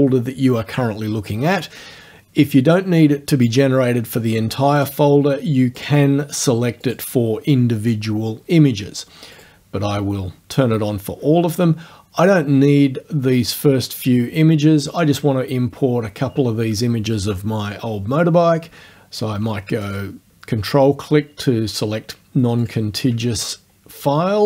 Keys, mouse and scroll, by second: 4.8 click, 5.8 click, 6.9 click, 9.4 click, 11.7-12.1 scroll down 1, 12.3 scroll down 1, 15.0 click, 15.7-16.3 scroll down 2, 17.9-18.5 scroll down 2, 19.9 ctrl+click, 21.5 scroll down 2, 22.6 ctrl+click, 23.3-23.9 ctrl+scroll down 3.